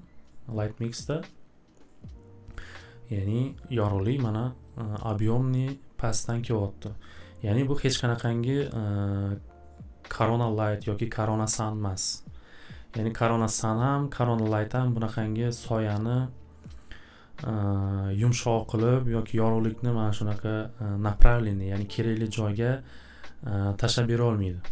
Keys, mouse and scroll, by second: 8.7 click.